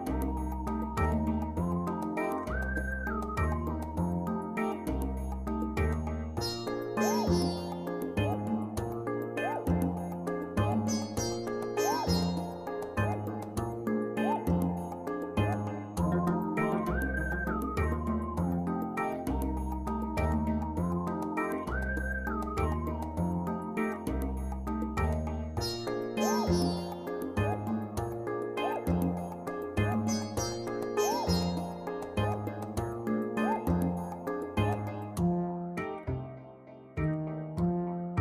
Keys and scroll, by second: 9.5 ctrl+g.